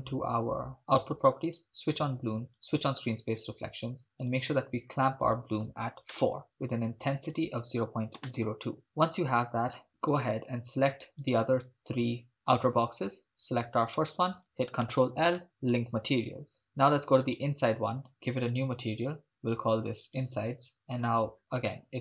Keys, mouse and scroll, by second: 1.6 click, 2.7 click, 4.3 drag, 5.3-6.3 drag, 7.0-8.4 drag, 9.9 right click, 11.4-12.3 shift+drag, 11.4 shift+right click, 12.3 shift+right click, 13.9 shift+right click, 14.8 ctrl+l, 17.4-18.5 right drag, 18.5 click, 19.2 click, 20.1 click, 21.0-22.0 scroll down 6.